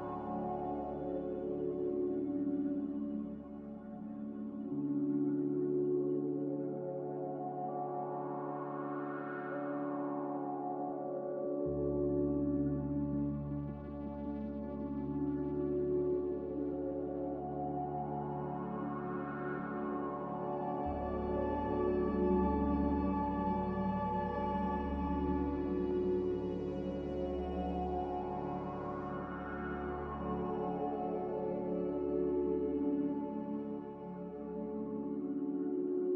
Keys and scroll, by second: 7.3 z, 23.9 ctrl+s, 27.3 a, 34.6 Delete.